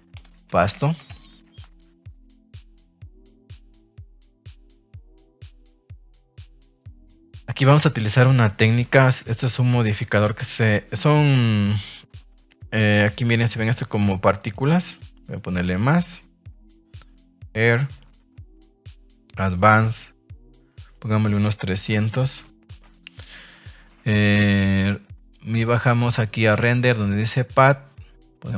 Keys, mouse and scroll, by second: 3.7 click, 6.1 ctrl+s, 6.4 middle drag, 6.7 shift+middle drag, 7.1 middle click, 8.8 KP_0, 10.7 ctrl+s, 11.2 right click, 14.3 click, 15.4 click, 17.2 click, 18.9 click, 20.8-22.7 drag, 22.3 KP_0, 25.8 click, 27.1-28.5 drag.